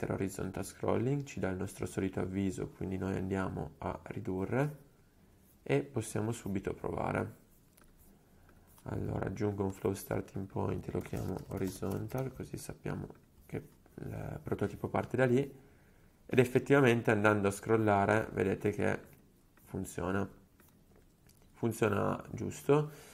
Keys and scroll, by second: 11.0-13.9 typing.